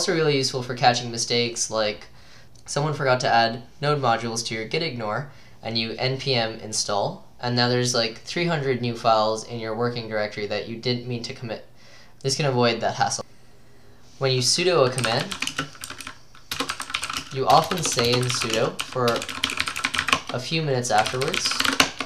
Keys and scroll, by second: 14.8-20.5 typing.